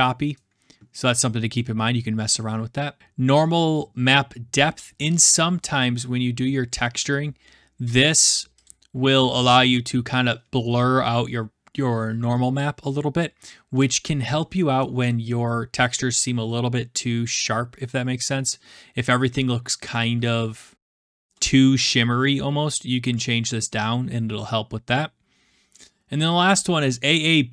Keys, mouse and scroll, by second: 4.5-5.4 scroll, 8.0 click, 8.6 click.